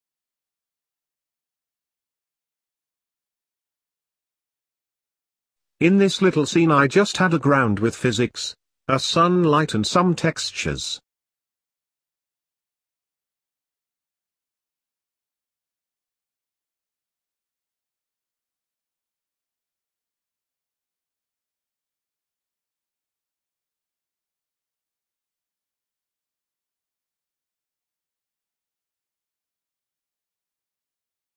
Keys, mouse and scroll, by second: 0.2 scroll down 1, 0.5 x, 0.8 shift+a, 1.9 s, 2.7 s, 4.3 ctrl+z, 4.6 s, 5.3 s, 6.5 shift+a, 7.5 g, 8.1-8.5 scroll down 3, 8.5-11.1 drag, 11.7 click, 12.3-13.6 drag, 15.6-16.3 middle drag, 16.3 ctrl+s, 16.7 click, 17.1-18.1 middle drag, 18.1 click, 18.5 click, 19.4 scroll up 2, 19.5 middle click, 20.4 scroll down 1, 20.6 click, 21.3-22.5 drag, 22.6-23.8 drag, 24.2 n, 24.3-26.1 drag, 26.6 middle click, 27.0 scroll up 1, 27.1 middle click, 27.4 click, 27.6 shift+a, 28.6 shift+d, 29.4-31.1 drag.